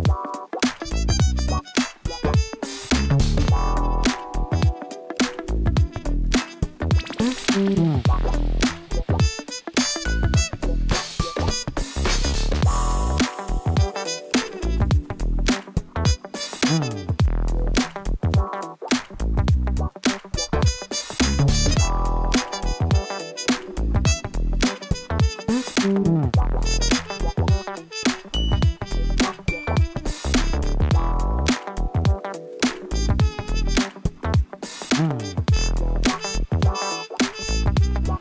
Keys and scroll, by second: 3.0 Tab, 5.4 s, 5.6 shift+z, 9.5 Tab, 11.5 alt+a, 23.4 Left, 24.5-26.7 typing, 29.9 BackSpace, 30.1 r.